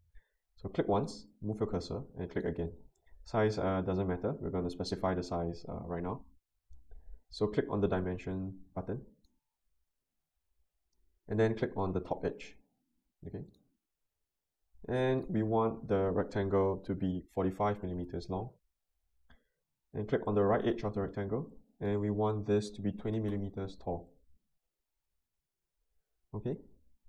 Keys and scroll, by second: 17.2-18.0 typing, 22.7-23.6 typing.